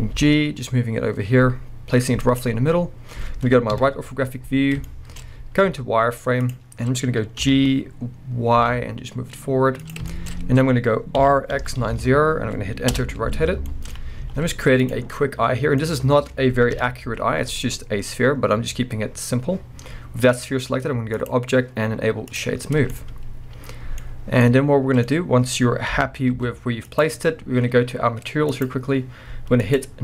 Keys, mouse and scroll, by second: 0.1 g, 2.4 click, 3.7 KP_3, 4.8-9.9 shift+middle drag, 5.7 z, 6.8-7.4 scroll up 2, 7.4 g, 9.9 click, 10.1-10.4 shift+scroll up 2, 10.3-16.7 middle drag, 11.2 r, 13.0 Return, 14.1 scroll down 1, 14.2 z, 15.8-16.7 scroll up 3, 16.7 KP_1, 17.5-21.2 middle drag, 17.5-17.9 scroll down 2, 17.9-18.6 scroll up 2, 18.6-21.2 scroll down 1, 21.2-22.9 drag, 22.5-22.9 scroll down 2, 22.9-27.0 middle drag, 24.0-24.4 scroll up 2, 25.0-25.9 scroll up 1, 25.9 g, 27.0 click, 28.5 click, 29.6-30.0 drag.